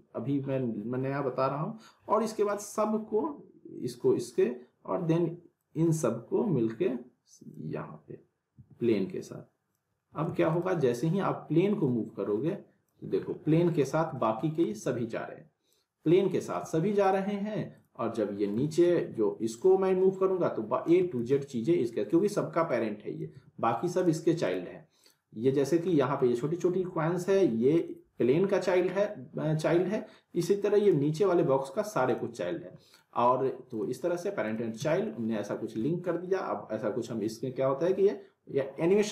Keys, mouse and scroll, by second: 2.5-4.3 drag, 8.5 w, 9.2-9.9 click, 10.2 ctrl+z, 10.5 click, 13.0 scroll down 1, 13.3-13.9 alt+middle click, 14.0 scroll up 1, 14.1-14.8 alt+middle click, 14.8 z, 15.7-16.3 click, 16.6 ctrl+z, 17.0 click, 18.4 scroll down 1, 18.6 alt+middle click, 19.6-20.8 drag, 21.2 ctrl+z, 21.5-22.7 scroll down 1, 23.0 click, 23.3 ctrl+z, 24.0 click, 25.6 scroll up 1, 25.9 alt+middle click, 26.4-27.2 scroll up 1, 27.7 click, 29.9 scroll down 1, 30.1 middle click, 30.8 click, 32.5-33.1 alt+middle click, 33.7 click, 34.8 z, 35.1-35.7 middle click, 35.5 scroll down 1, 35.8-36.4 alt+middle click, 36.2 scroll down 1, 37.0-39.1 drag.